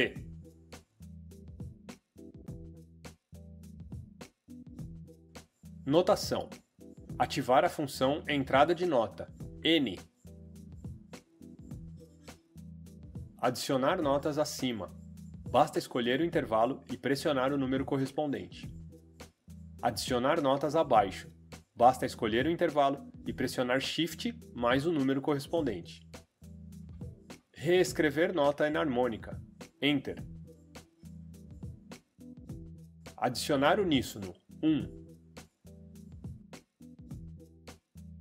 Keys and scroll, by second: 5.2 Escape, 9.8 n, 17.2 5, 23.4 shift+5, 29.7 Return, 34.9 1.